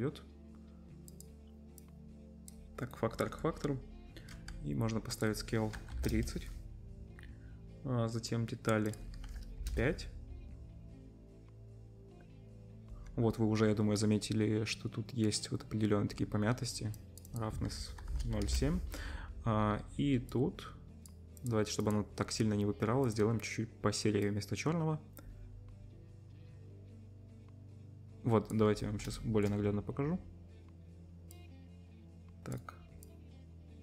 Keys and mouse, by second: 21.5 click, 21.9-23.0 drag, 23.1-29.2 drag, 29.2-31.3 shift+middle drag.